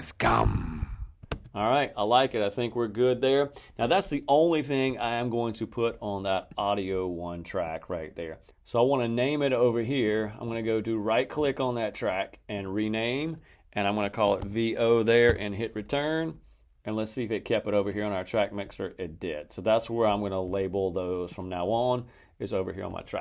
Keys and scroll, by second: 1.1 space, 13.9-14.8 typing, 15.2 Return.